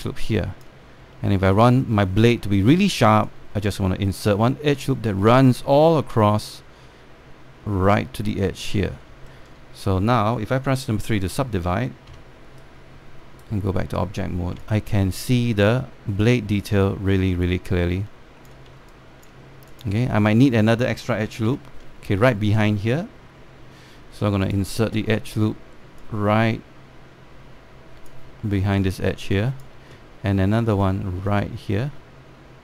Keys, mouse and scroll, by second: 0.2 click, 1.8 alt+middle click, 3.9 click, 9.7 scroll down 1, 10.0 alt+middle click, 10.4 scroll up 1, 11.8-12.7 typing, 13.2-15.3 right drag, 19.3 scroll up 2, 19.5 alt+click, 20.4 click, 22.2 1, 25.1-29.1 drag, 29.1 scroll down 1, 29.5 alt+click, 31.3-32.6 drag.